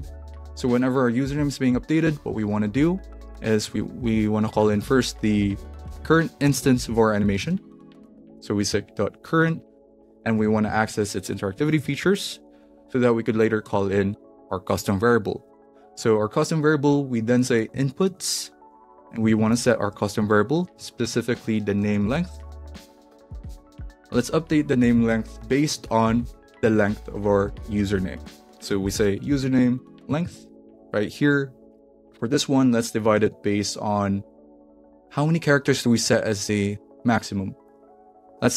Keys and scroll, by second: 0.0-1.2 typing, 1.4 Return, 3.3 Tab, 4.1-14.1 typing, 5.4 Return, 15.2-30.1 typing, 31.3 n, 31.7 Right, 32.2 Right, 33.0 space, 33.2 /, 33.3 space.